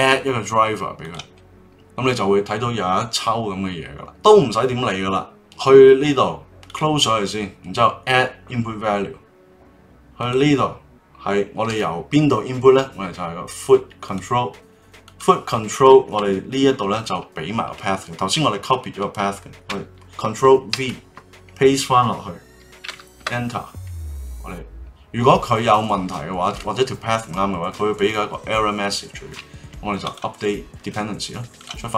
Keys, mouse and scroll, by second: 31.5 click.